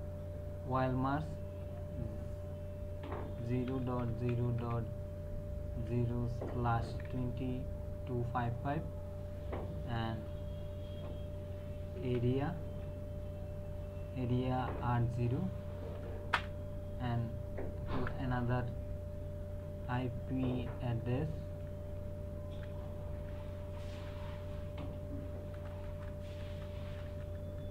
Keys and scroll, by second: 3.4-4.6 typing, 5.7 KP_Decimal, 6.5 KP_2, 6.9 KP_5, 10.1 space, 12.0 a, 12.6 Tab, 14.8 KP_0, 16.3 Return, 17.9 Up, 19.7 Left, 25.5 BackSpace.